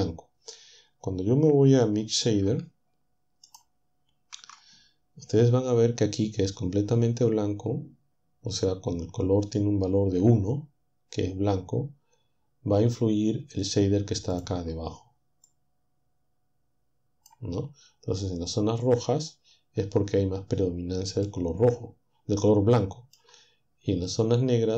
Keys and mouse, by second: 3.5 ctrl+shift+click, 14.3 click, 15.5-17.5 drag, 21.2-22.6 middle drag, 22.6 click.